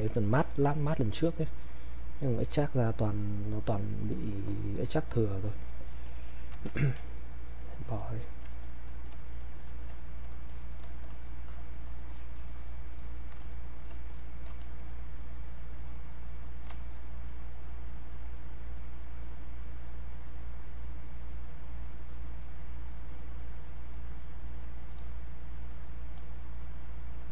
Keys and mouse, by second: 6.0 click, 6.8 ctrl+click, 8.9 click, 9.3 shift+click, 11.5 click, 12.1 shift+click, 14.1 shift+click, 15.1-27.3 drag.